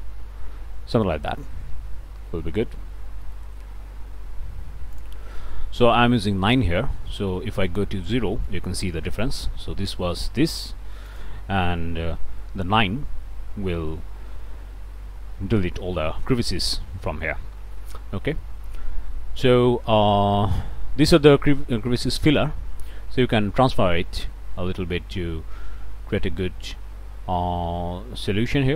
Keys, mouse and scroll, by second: 0.0 scroll down 1, 0.2 click, 0.5 middle click, 1.3-1.6 scroll up 1, 2.7 scroll down 1, 2.9 click, 3.2 middle click, 3.5-5.0 drag, 5.0 middle click, 5.2-7.7 drag, 7.7 middle click, 8.1 0, 8.5 Return, 11.1 click, 12.0 9, 12.6 Return, 14.4 scroll down 2, 15.5-15.8 scroll up 2, 16.2 scroll up 2, 17.7 scroll down 2, 22.0-28.7 drag.